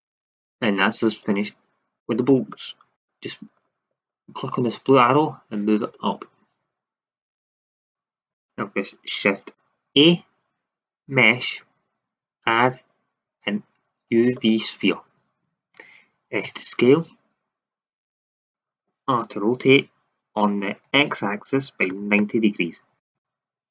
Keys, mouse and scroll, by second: 2.7-5.7 middle drag, 5.7-7.8 drag, 9.9 shift+a, 14.9-16.4 middle drag, 16.4 s, 19.1 r.